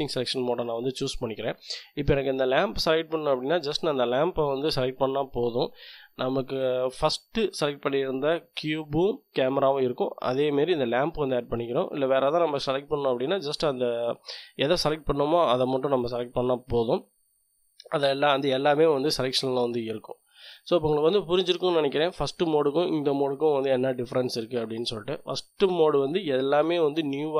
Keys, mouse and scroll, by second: 3.3 click, 12.7 click.